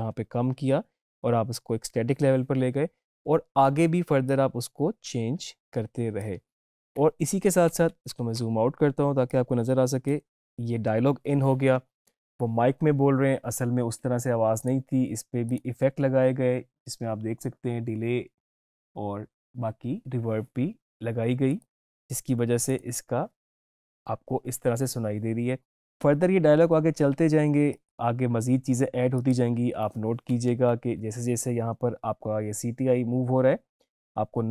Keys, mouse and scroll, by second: 4.3-7.6 drag, 9.4-12.5 drag, 14.7 click, 21.6 click, 27.8 click.